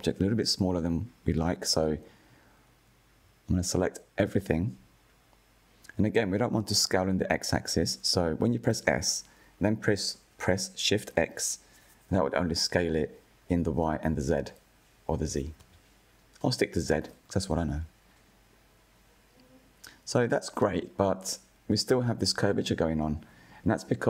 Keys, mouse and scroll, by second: 0.4 Tab, 1.9 click, 4.5 3, 5.6 a, 9.6 s, 14.3 Tab, 15.7 click, 17.0 scroll up 3, 17.4-18.0 shift+middle drag, 18.0 scroll up 3, 20.9 click, 21.3 Tab, 21.7-22.5 scroll down 5, 23.3 click, 23.8-24.0 shift+middle drag.